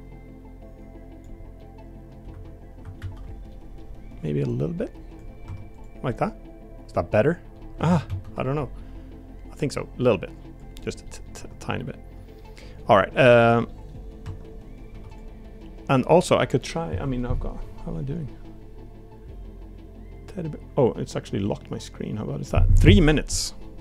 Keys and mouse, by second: 1.6 middle click, 3.0 ctrl+z, 3.5 middle click, 4.5 click, 5.4 Tab, 5.7 click, 6.1-7.5 middle drag, 7.9 ctrl+z, 8.0 ctrl+z, 8.5 middle click, 9.7 click, 10.7 click, 11.0 middle click, 11.3 Tab, 12.3-12.8 middle drag, 13.2 click, 13.6 middle click, 14.2 Tab, 14.9 3, 15.1 click, 16.0 click, 23.6 middle click.